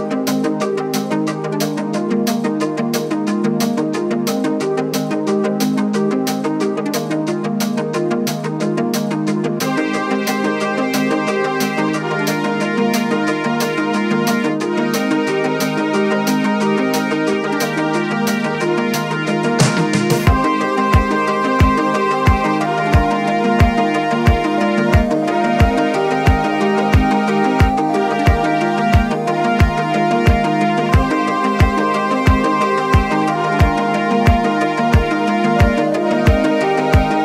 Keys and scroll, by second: 32.0-32.3 typing, 33.2 Return, 34.9 Return.